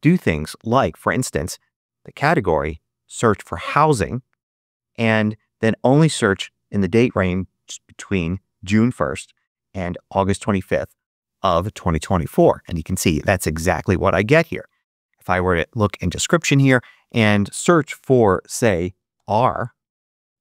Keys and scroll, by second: 19.0 shift+r, 19.8 shift+Return.